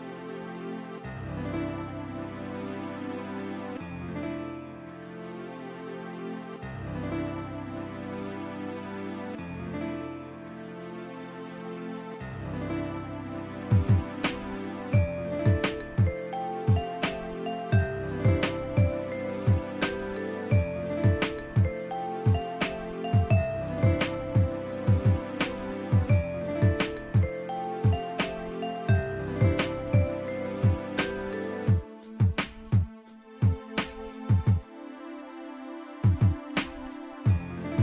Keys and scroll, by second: 2.1 scroll down 1, 2.2 scroll up 1, 6.0 scroll down 1, 6.1-6.4 scroll up 1, 9.4 scroll down 1, 9.5 scroll up 1, 10.7 scroll down 1, 13.8 scroll down 1, 13.9-14.2 scroll up 1, 16.5 scroll down 1, 16.6 scroll up 1, 17.6 scroll down 1, 17.7 scroll up 1, 20.9 scroll up 1, 24.1 scroll down 1, 27.7-28.2 scroll down 2, 28.5 scroll up 1, 30.2 scroll down 1, 31.3 scroll down 1, 35.3 scroll down 1, 35.5 scroll up 1, 36.8 scroll down 1, 36.9 scroll up 1.